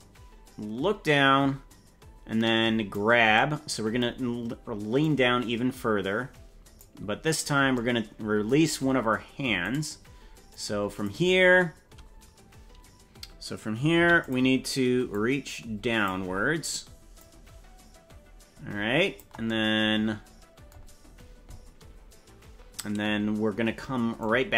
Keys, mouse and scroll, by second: 5.0-6.8 drag, 9.7 right click, 10.5 click, 11.9 scroll up 5, 13.9 i, 15.1 click, 17.1-19.1 drag, 24.2 click.